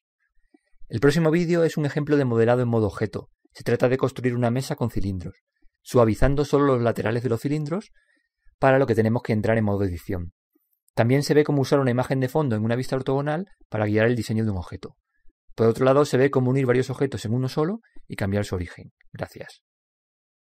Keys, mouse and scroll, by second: 0.5 click, 3.1-5.1 middle drag.